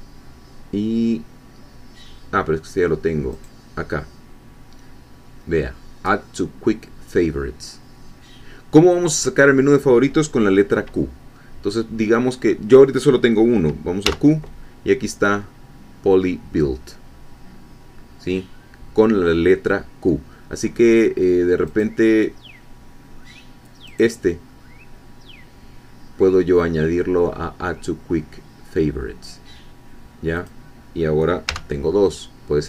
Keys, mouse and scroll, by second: 3.3 right click, 14.0 q, 21.6 right click, 23.8 right click, 30.4 click, 31.4 q.